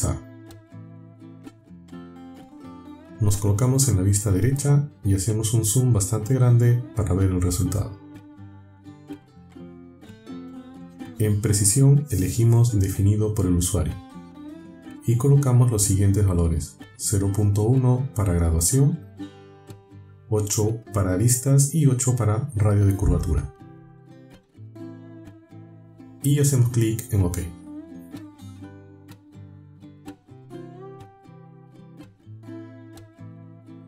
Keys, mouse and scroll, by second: 4.1 KP_3, 8.3 shift+middle click, 9.3 shift+scroll up 1, 9.9 shift+middle click, 13.1 click, 15.0 click, 16.2 click, 17.8 BackSpace, 18.9 KP_1, 20.0 click, 21.5 KP_8, 23.1 click, 24.1 KP_8, 25.2 click, 27.4 click.